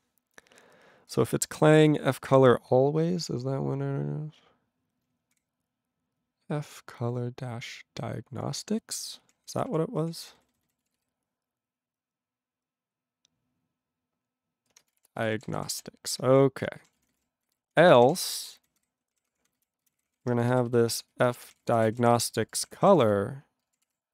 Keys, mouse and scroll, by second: 1.1 click, 1.1 click, 1.2 click, 1.3 click, 1.6 click, 2.3 ctrl+n, 5.3 ctrl+o, 9.2 ctrl+p, 9.3 ctrl+e, 9.4 ctrl+p, 9.5 ctrl+e, 9.5 ctrl+p, 9.7 ctrl+p, 10.2 ctrl+n, 10.4 ctrl+n, 10.5 ctrl+n, 10.6 ctrl+n, 10.8 ctrl+e, 10.9 ctrl+b, 14.7-16.3 typing, 16.9 ctrl+p, 17.0 ctrl+e, 17.0 ctrl+n, 17.1 ctrl+n, 17.2 ctrl+e, 17.4 ctrl+n, 17.7 Tab, 17.9 ctrl+p, 18.0 ctrl+a, 18.0 ctrl+p, 18.2 ctrl+space, 18.2 ctrl+n, 18.6 alt+w, 18.7 ctrl+n, 18.8 ctrl+y, 19.1 ctrl+k, 19.3 ctrl+p, 19.4 ctrl+p, 19.6 ctrl+n, 19.8 ctrl+n, 20.0 ctrl+k, 20.1 ctrl+p, 20.2 ctrl+e, 20.6 alt+b, 20.7 alt+b, 21.1-24.1 typing, 23.8 alt+d.